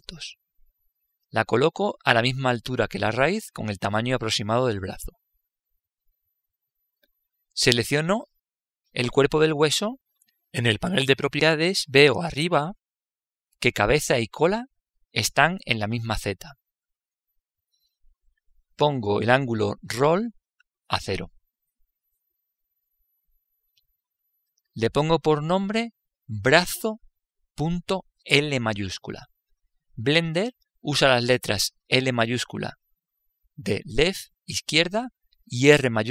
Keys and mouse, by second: 6.5 click, 9.8 right click, 11.9 click, 21.6 click, 33.1-36.1 drag.